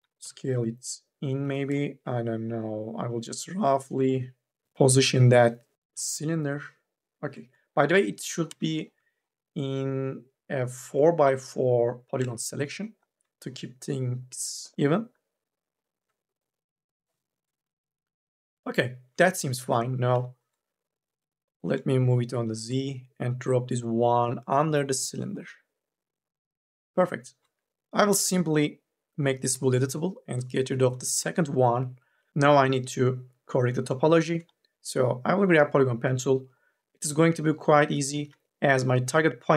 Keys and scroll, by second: 0.0 t, 1.3 e, 8.1 3, 8.3 e, 8.8 s, 29.3 c, 31.0 Delete, 32.3 1, 38.3 ctrl+z.